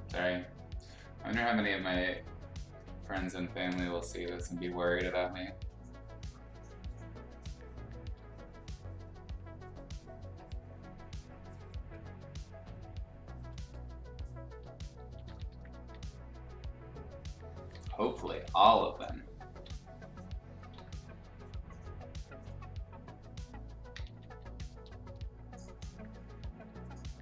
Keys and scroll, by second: 4.0 ], 4.2 ], 4.3 ], 15.0 [, 15.7 [, 17.7-19.5 typing, 20.7 ctrl+z, 23.9 [, 24.1 [, 24.7 ], 26.6 x.